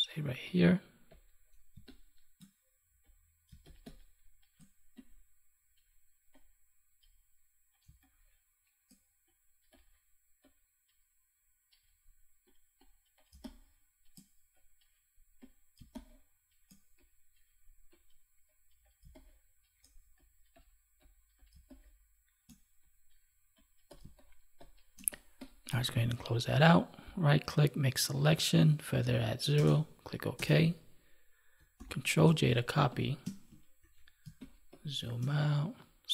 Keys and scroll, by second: 1.7 space, 15.7 space, 19.0 space, 21.5 space, 24.0 space, 31.7 ctrl+j.